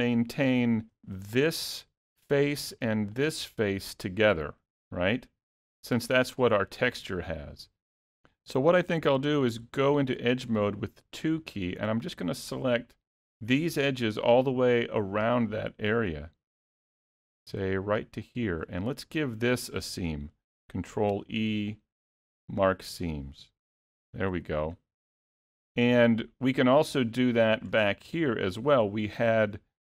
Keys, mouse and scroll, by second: 0.9 3, 1.4 click, 2.2 middle click, 3.2 shift+click, 3.6 scroll up 1, 3.6 middle click, 7.0 middle click, 9.5 2, 12.1 click, 13.0 shift+click, 13.4 middle click, 14.2 shift+click, 14.5 middle click, 16.6 middle click, 18.3 shift+click, 18.8 middle click, 21.2 ctrl+e, 24.4 alt+a, 24.8-25.1 scroll down 1, 25.1 middle click, 27.2 middle click, 27.9-28.3 scroll up 2, 28.3 shift+middle click.